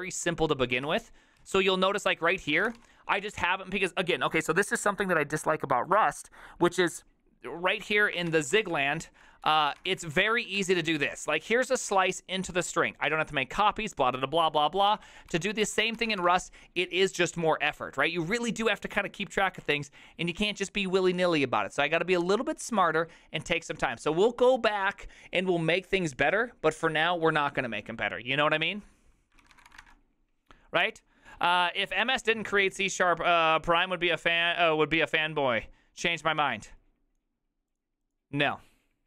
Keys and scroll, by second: 0.7 k, 0.9 ctrl+u, 1.5 ctrl+u, 1.9-3.3 typing, 8.1-11.3 typing, 15.0 ctrl+c, 15.4 ctrl+n, 15.7 ctrl+t, 15.8-16.7 typing, 29.4-30.2 typing.